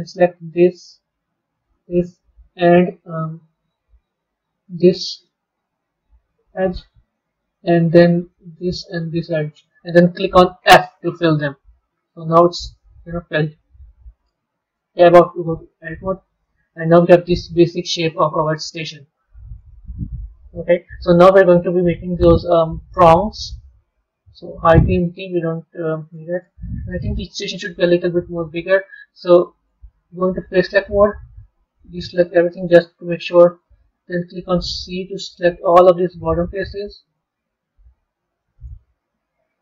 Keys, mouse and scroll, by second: 0.0 shift+click, 1.5 shift+click, 2.1 middle click, 3.0-4.6 scroll down 1, 4.6 shift+click, 5.2-8.1 middle drag, 8.1 shift+click, 9.0 shift+click, 11.2-14.1 middle drag, 14.1 Tab, 14.9-17.9 middle drag, 18.1-21.1 middle drag, 22.1-24.2 middle drag, 24.2 click, 24.9-27.6 middle drag, 27.6 b, 28.4-30.6 middle drag, 30.6-31.6 drag, 32.8-33.9 middle drag, 38.9 middle click.